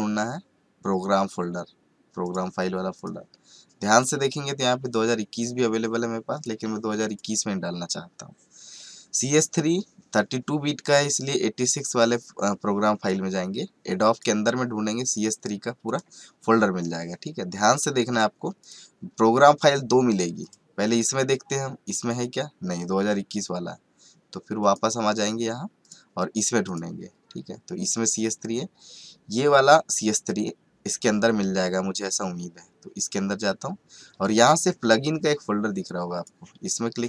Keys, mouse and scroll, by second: 2.2 click, 6.3 click, 13.0 click, 18.1 click, 24.6 click, 33.0 click.